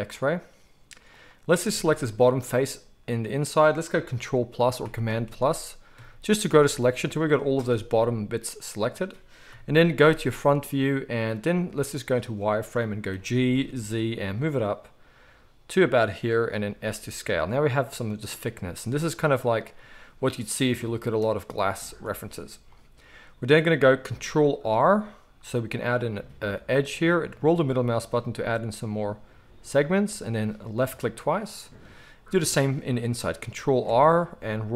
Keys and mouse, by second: 1.2-21.4 middle drag, 7.6 g, 9.5 KP_1, 11.5 z, 13.1 g, 16.7 s, 21.4 z, 24.7 ctrl+r, 33.7 ctrl+r.